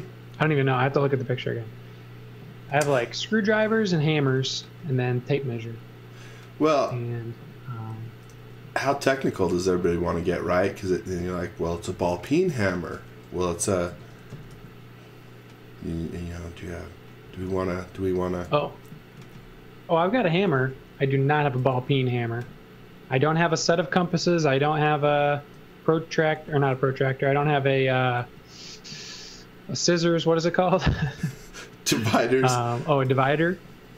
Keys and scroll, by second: 8.3 e, 10.9 z, 13.9 x, 14.5 l, 15.5 l, 17.2 space, 18.5 super+z, 19.2-21.6 typing, 22.7 l, 24.2 e, 25.4 space, 27.1 super+z, 28.3 l, 30.9-33.9 typing.